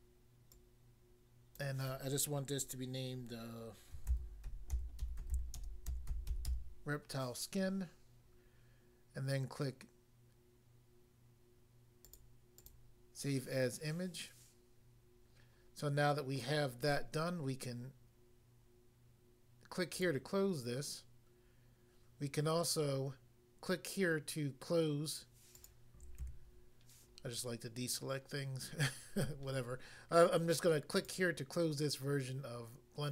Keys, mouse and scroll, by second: 0.5 click, 1.6 click, 4.0-6.5 typing, 12.0 click, 12.1 click, 12.6 click, 19.9 click, 20.0 click, 25.6 click, 25.6 click, 26.2 a, 31.0 click, 31.1 click.